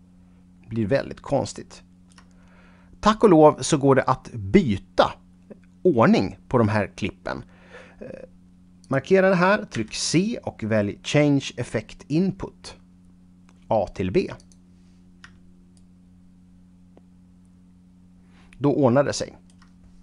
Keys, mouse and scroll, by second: 8.9 click, 9.8 c, 14.5 click, 15.8 shift+right click.